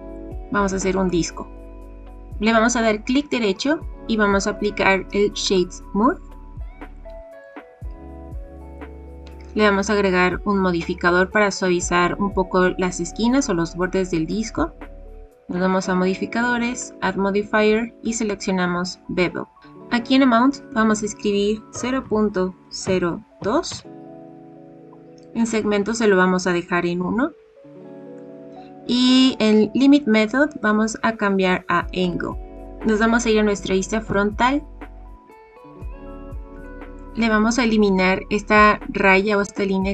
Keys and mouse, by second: 0.1-1.0 middle drag, 3.1-5.5 right drag, 6.9 click, 16.7-18.0 drag, 20.7-24.3 drag, 27.0-28.1 middle drag, 30.5-32.1 drag, 34.0 KP_1, 35.3-35.8 shift+middle drag, 36.7 shift+middle click.